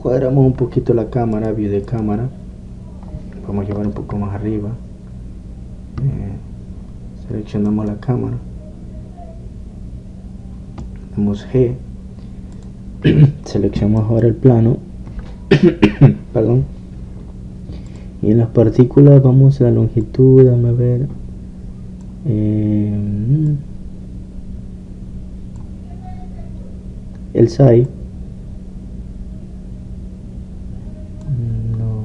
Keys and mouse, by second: 0.0 Escape, 3.1 Escape, 3.1 click, 3.3 click, 13.7-17.3 drag, 18.9-20.7 drag, 21.1-23.0 drag, 24.5-26.4 drag, 28.9-30.7 drag.